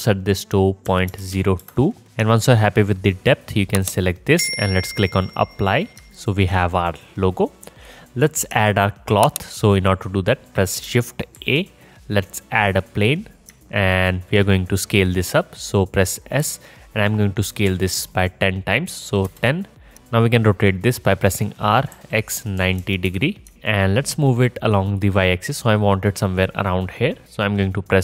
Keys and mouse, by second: 11.4 shift+a, 13.5-19.9 alt+drag, 16.5 s, 21.4 r, 21.9 click, 23.9-28.0 alt+drag.